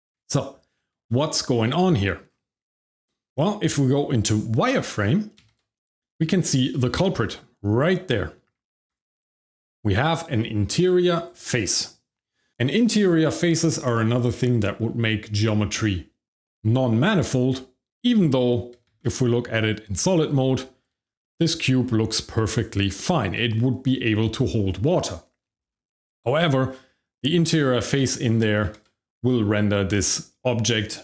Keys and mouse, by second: 0.0 Tab, 1.0 middle drag, 1.9 middle drag, 5.4 shift+z, 6.1 shift+middle click, 6.7 click, 8.4 shift+z, 8.7 Tab, 9.6 click, 18.9 shift+z, 19.7 Tab, 21.0-23.2 shift+middle drag, 26.7 Tab, 28.6 shift+z.